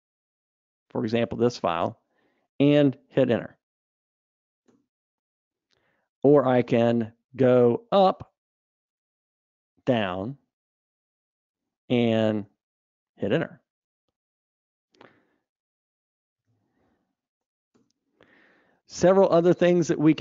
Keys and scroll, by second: 7.0 super+Up, 16.8 super+e.